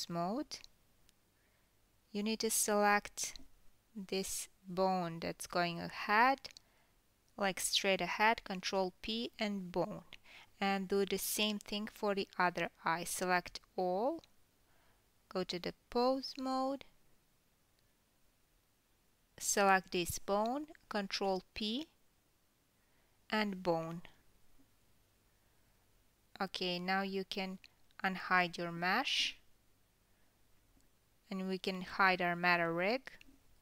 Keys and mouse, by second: 3.2-8.8 shift+middle drag, 5.9 ctrl+p, 8.1 Tab, 9.3-10.8 middle drag, 10.8-12.3 drag, 12.3-18.6 middle drag, 12.7 Tab, 13.4 a, 14.6 Tab, 18.6-20.9 drag, 20.9-22.7 middle drag, 23.1 ctrl+p, 25.1 Tab, 25.1-25.8 middle drag, 25.8-32.9 drag, 29.2 alt+h, 32.9-33.6 middle drag.